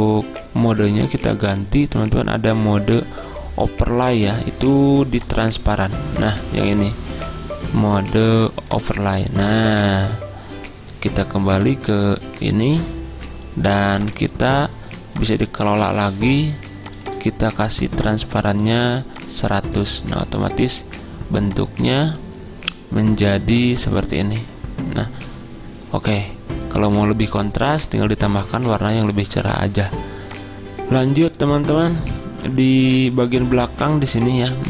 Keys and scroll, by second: 33.5 z.